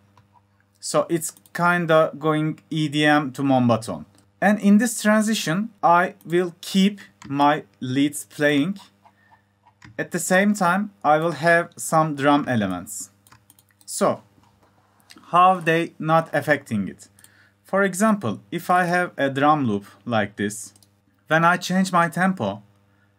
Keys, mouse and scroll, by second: 4.9 click, 5.0 click.